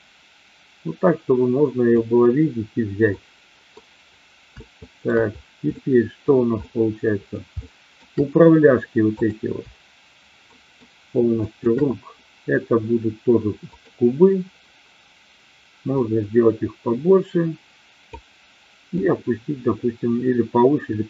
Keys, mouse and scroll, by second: 3.3 middle click, 4.7-5.0 shift+middle drag, 5.8 middle click, 6.7-7.3 middle drag, 7.7 shift+middle click, 9.2 click, 10.4 shift+middle drag, 11.4 shift+click, 13.7 click, 15.8-18.2 drag, 18.9-21.0 drag.